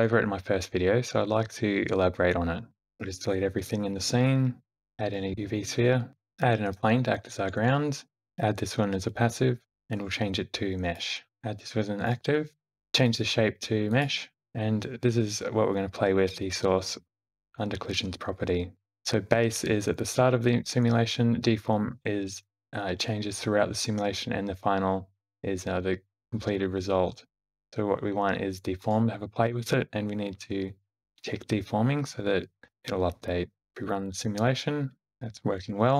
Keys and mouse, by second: 2.8 a, 2.8 x, 4.6 shift+a, 6.1 shift+a, 7.5 s, 8.1 q, 9.9-11.0 drag, 11.4 q, 12.8-14.0 drag, 18.9-28.8 drag, 31.0 click, 33.7 g, 33.7 space, 35.4 space, 35.7 shift+Left.